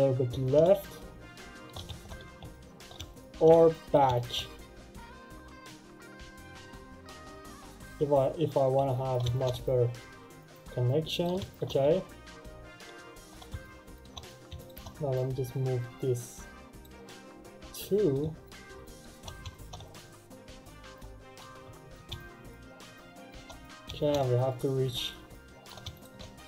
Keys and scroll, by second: 1.8 ctrl+z.